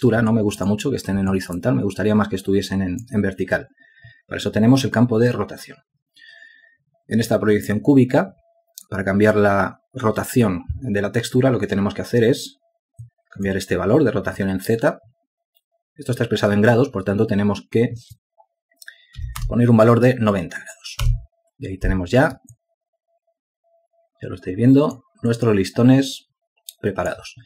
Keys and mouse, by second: 2.1 alt+shift+click, 3.1 alt+click, 22.9 Return, 24.4 alt+click, 27.2 alt+click.